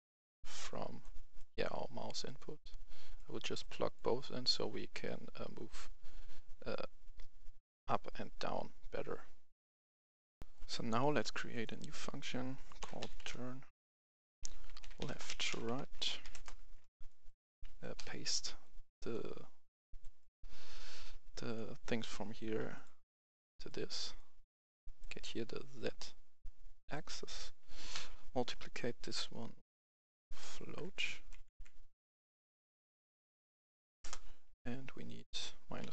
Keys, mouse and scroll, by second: 0.1-4.7 drag, 10.3 F10, 11.4 click, 12.7-13.1 typing, 14.7-15.1 typing, 15.4 shift+Right, 16.2 Return, 17.0 right click, 18.5-27.6 drag, 29.5 typing, 30.7 Up, 30.9 Up, 31.2 Down, 31.4 Down, 31.7 typing, 33.0 Up, 33.2 Up, 33.4 Up, 33.9 Return, 34.9 click.